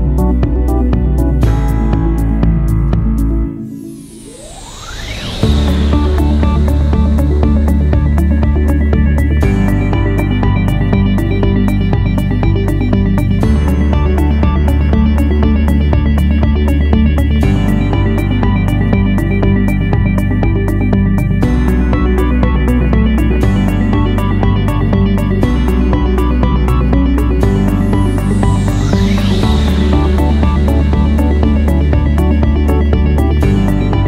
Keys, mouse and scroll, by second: 9.0 ctrl+a.